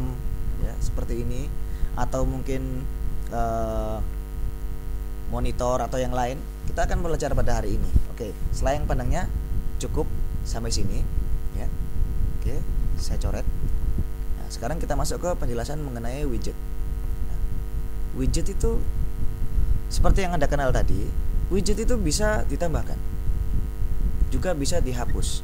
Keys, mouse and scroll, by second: 11.7-13.7 drag, 13.9 ctrl+s, 14.7 click, 17.2 ctrl+click, 18.8 ctrl+b, 19.5 click.